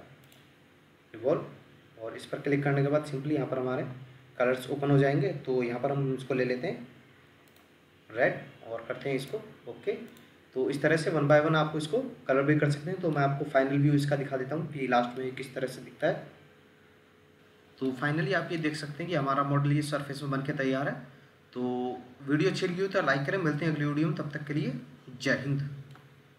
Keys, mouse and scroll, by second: 10.4-11.3 scroll up 1, 11.3 middle click, 14.6-15.1 scroll down 1, 15.2 middle click, 17.3 middle click.